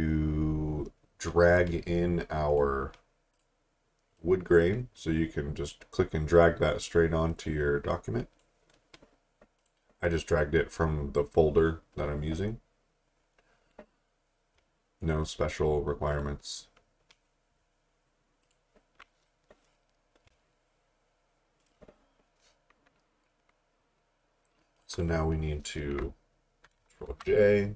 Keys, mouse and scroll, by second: 4.4-8.5 drag, 13.0 scroll up 1, 15.2 click, 21.6 right click, 24.8 click, 27.1 j.